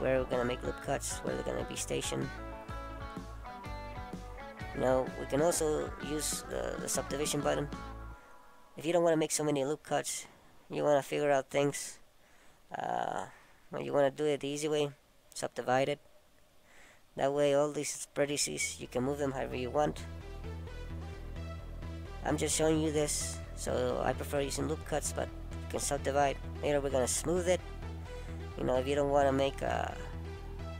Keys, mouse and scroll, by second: 3.6 click, 4.8 click, 5.9 middle click, 11.7 right click, 14.3 a, 14.6 a, 15.5 right click, 16.9 middle click, 24.2-24.9 scroll down 2, 24.9-26.0 scroll up 2.